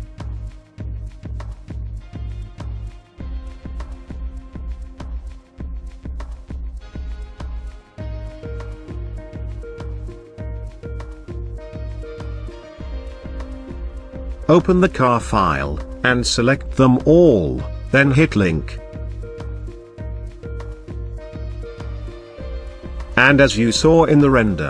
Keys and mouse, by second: 3.6 click, 3.6 middle click, 3.9 right click, 4.5 click, 4.8-8.8 drag, 9.5-10.8 drag, 24.4 g.